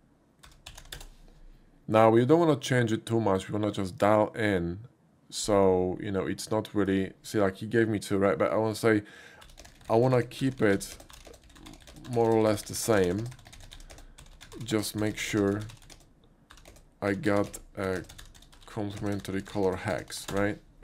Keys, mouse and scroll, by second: 0.0-1.8 typing, 0.9 Return, 6.8 click, 9.6-20.2 typing, 20.3 Return.